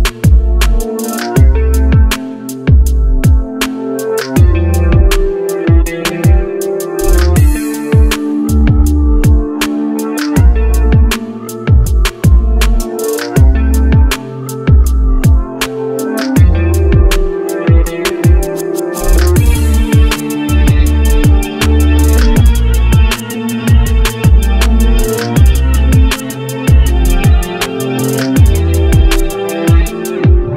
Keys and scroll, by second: 2.1 shift+space, 21.9 ctrl+z.